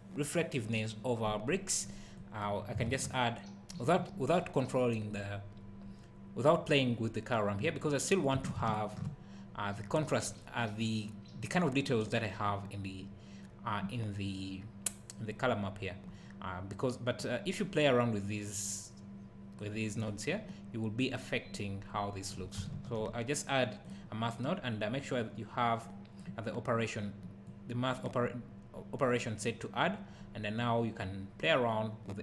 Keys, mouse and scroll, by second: 2.1-8.3 drag, 8.7 ctrl+click, 17.4-24.5 drag, 25.8-27.5 drag, 31.2-32.2 drag.